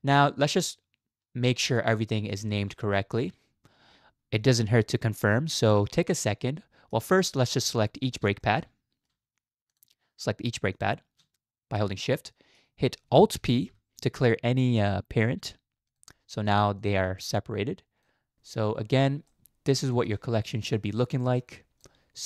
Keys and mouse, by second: 0.1-2.3 middle drag, 2.7 shift+middle drag, 3.2-6.9 middle drag, 8.0 shift+middle click, 8.4 middle click, 8.6-9.1 drag, 10.8 shift+middle click, 11.8-12.1 middle drag, 12.1-12.6 drag, 13.7 alt+p, 17.4-18.1 drag, 19.3-19.7 middle drag, 19.9 shift+middle click, 20.8-21.8 drag.